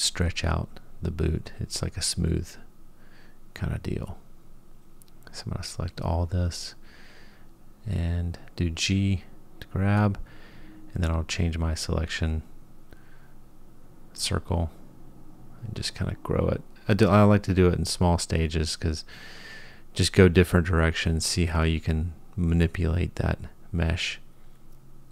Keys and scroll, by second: 7.9 g, 15.8 g, 19.9 g.